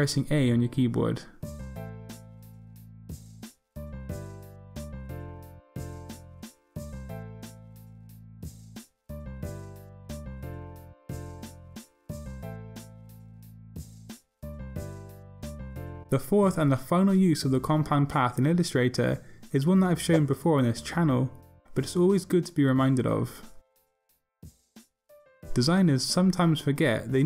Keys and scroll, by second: 9.4 a.